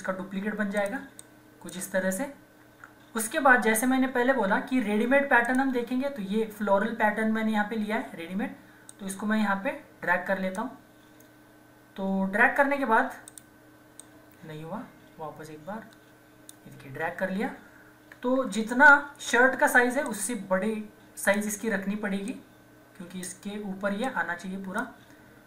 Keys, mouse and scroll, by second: 0.8-2.6 drag, 2.6 ctrl+z, 5.4 click, 8.9-13.1 drag, 13.3-18.4 drag, 15.0 typing, 18.4 ctrl+-, 20.0-25.4 drag, 25.2-25.4 typing.